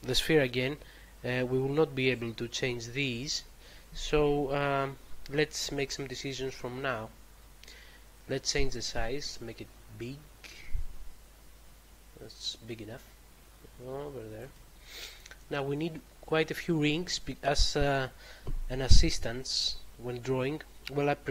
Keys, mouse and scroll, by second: 8.1 click.